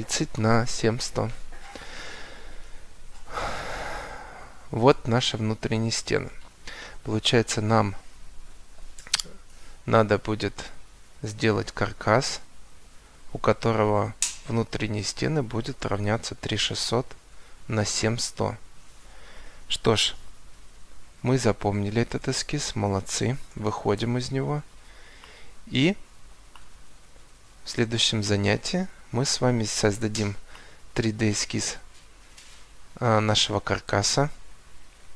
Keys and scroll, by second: 5.6 Escape.